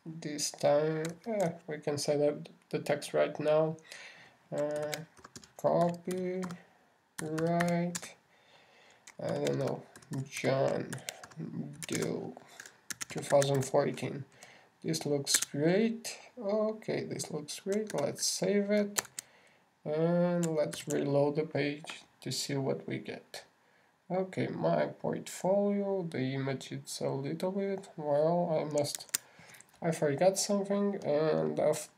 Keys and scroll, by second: 2.5 alt+shift+8, 6.2 shift+c, 6.6 shift+o, 10.7 shift+j, 11.0 shift+o, 12.1 shift+space, 12.4 shift+d, 12.7 shift+o, 19.3 super+s, 20.4 super+Tab, 22.2 super+r, 30.4 super+Tab.